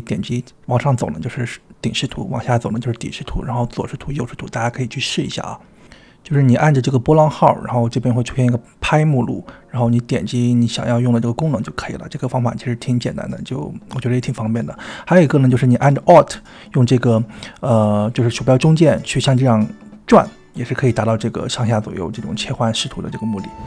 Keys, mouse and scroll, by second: 0.0 click, 0.0 `, 0.5 `, 3.3 `, 4.1 `, 5.8 `, 6.4 `, 8.0 click, 8.3 middle drag, 8.7 `, 8.9 `, 14.8-16.8 middle drag, 18.8 alt+middle drag, 20.4 alt+middle click, 21.3 alt+middle drag, 22.2 alt+middle click, 22.8 alt+middle drag, 23.6 alt+middle click.